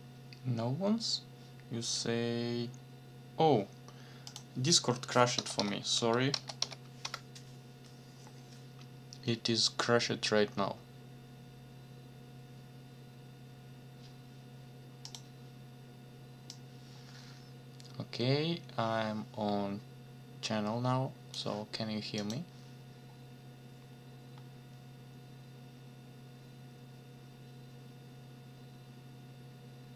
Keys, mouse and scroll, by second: 4.3 click, 5.1-7.1 typing, 15.0 click, 16.5-21.5 drag, 22.2 click, 23.7-24.0 scroll down 1, 24.3 scroll down 1.